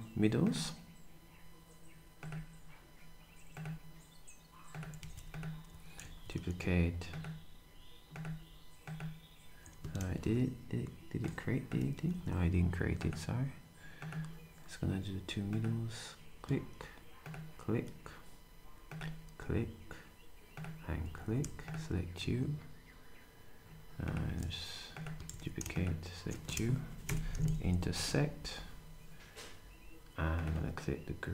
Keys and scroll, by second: 5.0 s, 6.0 d, 21.0 s, 27.0 ctrl+shift+8, 27.7 d.